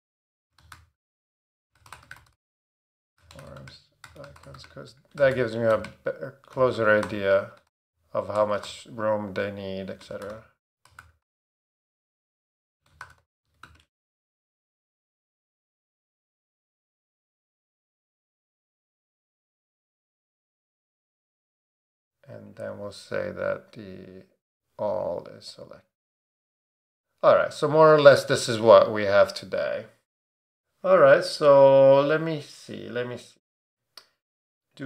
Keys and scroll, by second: 0.0-8.6 typing, 10.0-14.7 typing.